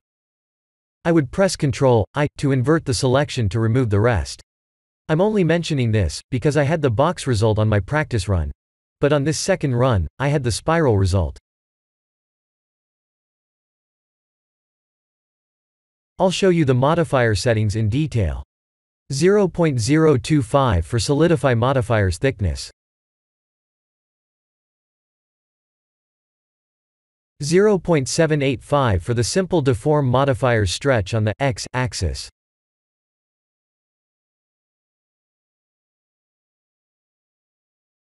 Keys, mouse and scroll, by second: 0.1 click, 1.7 click, 2.2 click, 3.4 click, 4.3 click, 6.1 click, 6.9-8.9 scroll down 21, 9.5 click, 10.3 middle click, 17.4 click, 24.5 click, 26.4 click, 28.7 click, 29.3 click, 30.6 click, 31.2 click, 31.9 click, 32.9 click, 34.4 KP_Decimal.